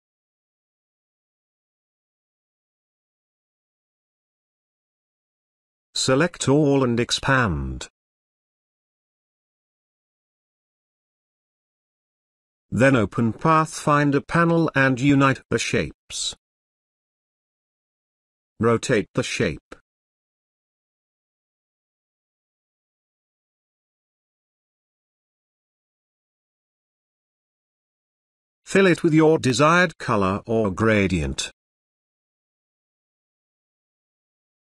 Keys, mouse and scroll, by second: 1.2-1.9 ctrl+drag, 4.0-5.6 drag, 12.2-21.4 drag, 21.8 space, 21.9-24.0 ctrl+drag, 24.7 space, 24.9 ctrl+click, 25.9-27.5 ctrl+drag, 27.7 scroll up 1, 27.9 space, 28.1 ctrl+click.